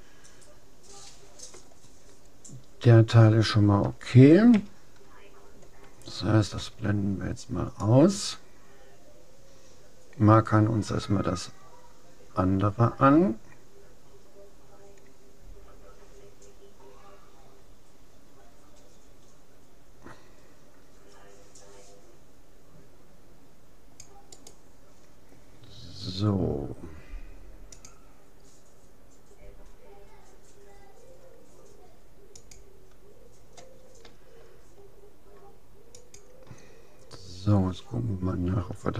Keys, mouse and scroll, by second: 4.5 a, 6.6 c, 24.6-26.2 right drag, 36.0-37.8 drag.